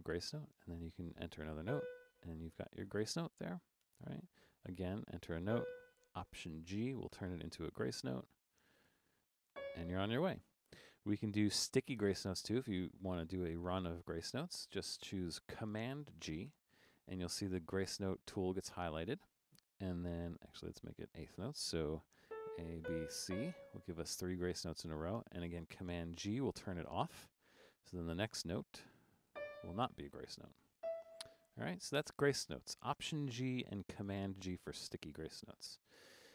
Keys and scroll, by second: 0.7-2.2 typing, 3.8 4, 5.5 b, 7.1 alt+g, 8.9 5, 9.5 c, 14.0 Down, 14.2 Down, 16.5 super+g, 20.3 4, 22.2-23.2 typing, 26.2 super+g, 28.7-30.8 typing, 35.4-36.3 typing.